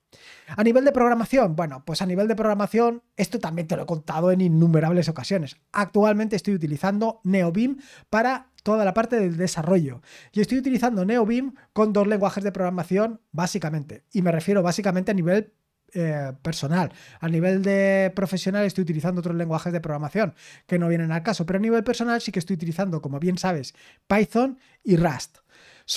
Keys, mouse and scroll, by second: 2.3 scroll down 2.